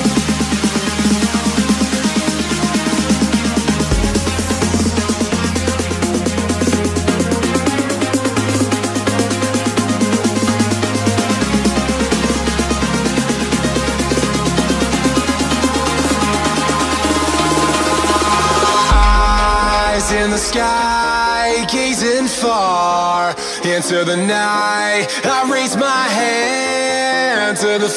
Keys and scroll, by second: 0.4 x, 1.2 space, 3.2 z, 6.4 z, 8.2 space, 8.8 space, 8.9 z, 11.2 x, 12.0 x, 15.1 z, 16.0 z, 19.1 space, 19.4 x, 20.7 z, 22.2 x, 26.0 space, 26.3 x.